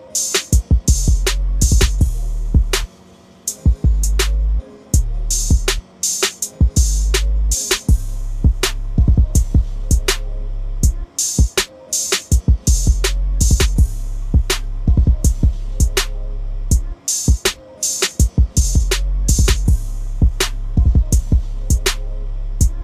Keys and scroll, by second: 11.1 ctrl+z.